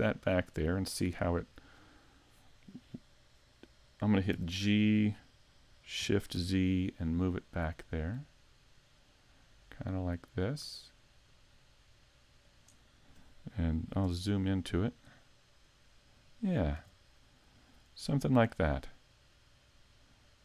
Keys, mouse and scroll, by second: 4.3 g, 14.0 KP_Decimal, 14.7-15.1 scroll down 4, 15.1 middle click, 16.8 a, 17.1 middle click.